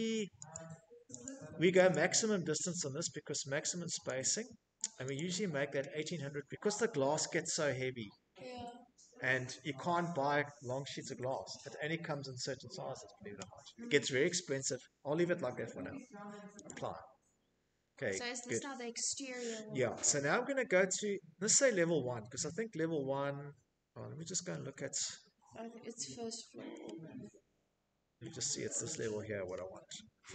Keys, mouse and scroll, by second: 0.1 click, 2.3 click, 3.3 click, 14.8 click, 16.6 click, 17.4 scroll, 21.5-22.3 scroll, 22.3-22.8 scroll, 23.5 scroll, 26.3-27.9 shift+scroll, 28.3 scroll, 29.7-30.3 scroll.